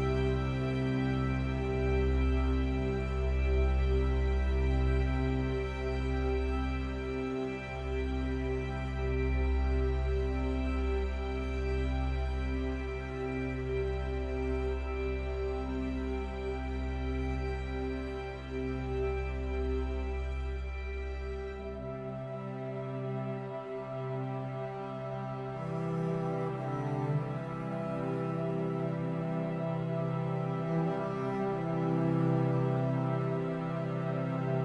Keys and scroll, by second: 8.1 ctrl+z.